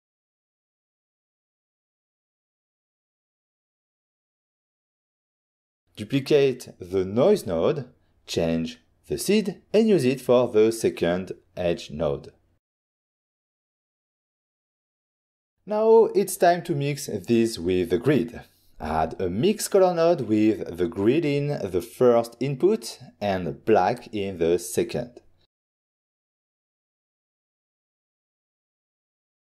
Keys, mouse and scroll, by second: 0.7 click, 1.7 click, 2.4 middle click, 3.0 middle click, 3.2 click, 3.8 typing, 4.2 Return, 7.5 click, 8.2 ctrl+shift+d, 9.1 click, 9.9 middle click, 10.9 click, 11.3 click, 11.7 middle click, 12.2 middle click, 13.0 click, 14.3 click, 17.8 middle click, 18.1 middle click, 19.3 ctrl+shift+click, 20.4-21.9 typing, 20.6 click, 23.5 Down, 23.7 Return, 24.5 click, 25.3 click, 26.6 click, 27.6 click, 27.8 click, 28.7 click.